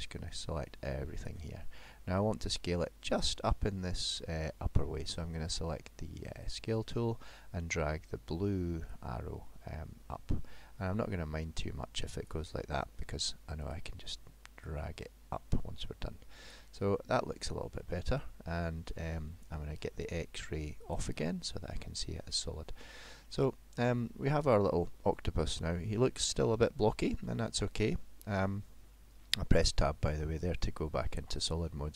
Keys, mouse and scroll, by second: 1.8 middle click, 4.2 middle click, 6.5 click, 8.9 click, 13.7 click, 14.7 click, 16.9 middle click, 20.8 click, 21.7 middle click, 23.0-23.3 scroll down 4, 23.4 middle click, 24.4-24.8 scroll up 2, 24.9 middle click, 25.9 middle click, 27.3 Tab, 28.9 middle click, 31.4 middle click.